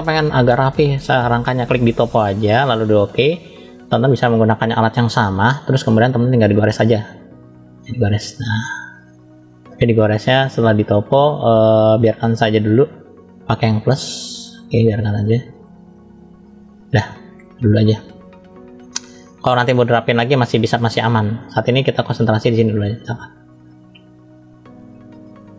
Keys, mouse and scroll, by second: 1.6-3.1 drag, 5.7 middle click, 6.6-7.1 scroll up 1, 7.4 click, 13.0 click, 13.7 click, 14.9 click, 15.7 click, 16.0 click, 16.3 click, 16.5 click, 17.0 scroll up 1, 17.1 middle click, 18.4 middle click, 18.8-19.4 scroll down 1, 19.4-20.9 middle drag, 19.4 scroll down 1, 21.4 middle click, 22.8 scroll up 1, 23.4-24.7 middle drag, 25.1-25.5 middle drag.